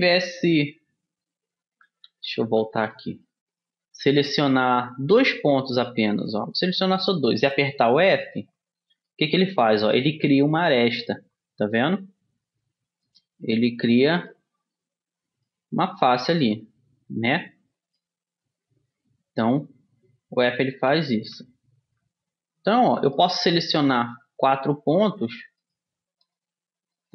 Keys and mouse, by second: 0.6 ctrl+z, 1.0 ctrl+z, 1.8 ctrl+z, 2.3 ctrl+z, 3.1 click, 3.3 middle click, 4.2-5.4 drag, 5.9 middle click, 8.5 f, 13.3-16.1 right drag, 15.9 f, 16.1 click, 20.8 ctrl+z, 22.0 ctrl+z, 22.6 ctrl+z, 23.3-24.7 middle drag, 24.7-27.1 drag.